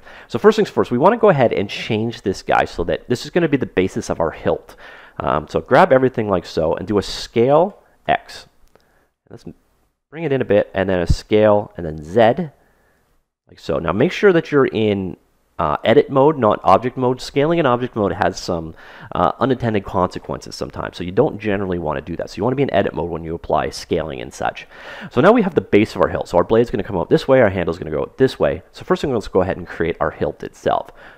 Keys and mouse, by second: 5.5 a, 7.6 s, 11.1 s, 30.7 ctrl+Tab.